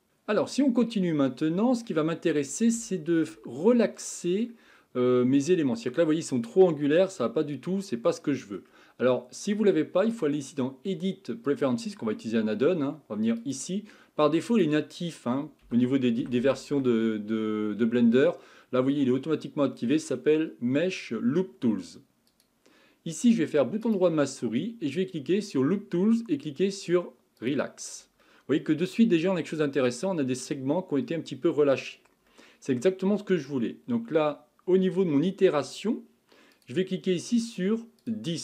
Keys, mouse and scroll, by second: 2.2-2.9 scroll up 3, 2.9-9.6 shift+middle drag, 10.1-13.3 drag, 23.8-27.0 right drag, 28.3-33.1 middle drag, 33.1-36.2 scroll up 2, 36.5-38.4 drag.